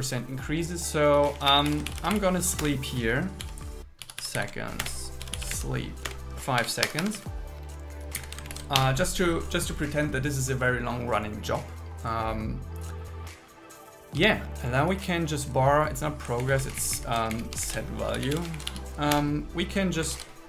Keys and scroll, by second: 1.4 shift+t, 2.0 shift+u, 2.7 Return, 4.1 shift+4, 4.5 shift+c, 4.9 Return, 6.1 Return, 6.9 Escape, 7.2 Right, 8.2 Down, 8.6 shift+super+Left, 8.8 BackSpace, 14.2 Tab, 16.5 alt+Left, 17.4 Left, 18.6 shift+v, 19.2 Return, 20.2 super+s.